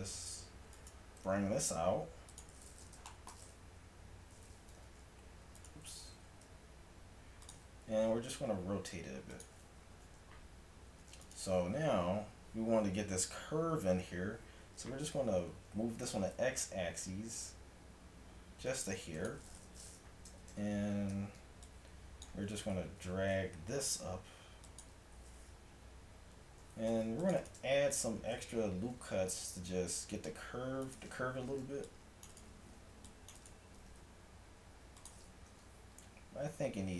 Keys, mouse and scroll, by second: 1.2 g, 3.1-5.6 drag, 4.7 g, 6.1 g, 8.1 r, 10.0 a, 11.3-13.2 right drag, 15.5 g, 19.6 middle click, 20.1 a, 21.2 z, 22.9 g, 26.2 a, 26.9 ctrl+r, 28.0-30.0 drag, 29.0 g, 31.5 a, 31.7 c, 33.0 c, 33.8 g, 35.5 a.